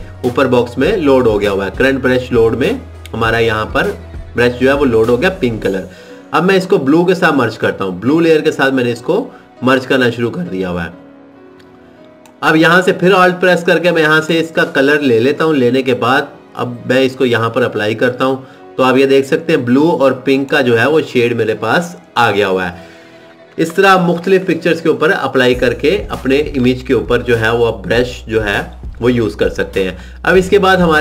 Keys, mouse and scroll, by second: 9.4 click, 13.2 alt+click, 18.4 click.